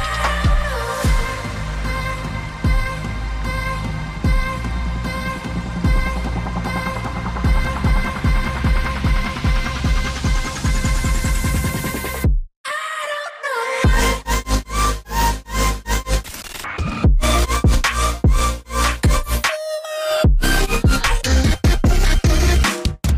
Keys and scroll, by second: 3.3 typing, 4.1 Tab, 6.0-7.3 typing, 9.3-10.0 typing, 12.4 Return, 12.7 typing.